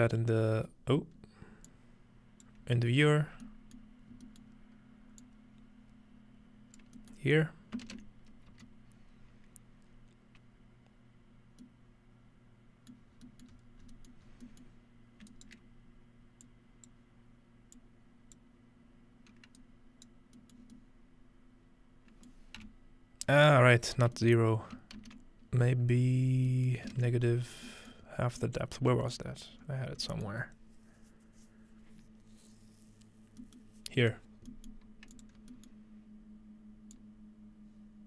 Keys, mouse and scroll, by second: 0.6 scroll down 1, 0.7 scroll up 4, 1.7-2.5 drag, 2.7 scroll down 2, 3.0 click, 3.4 middle click, 4.5-5.1 middle drag, 5.2-6.8 drag, 7.9 ctrl+space, 8.5 z, 13.1 middle click, 13.2 scroll down 2, 13.5-14.4 scroll up 8, 14.8-15.5 scroll up 2, 15.4 shift+right click, 16.5-16.9 shift+drag, 17.8-18.4 drag, 20.4-24.0 middle drag, 24.2-25.7 middle drag, 25.5-26.4 ctrl+scroll down 1, 26.0 ctrl+middle click, 26.7-28.0 ctrl+middle drag, 26.9 ctrl+space, 27.3-27.6 scroll down 1, 28.0 scroll up 2, 28.7 scroll down 2, 29.5-30.1 scroll up 2, 33.4 middle click, 34.4-36.9 scroll down 1, 35.1-38.0 drag.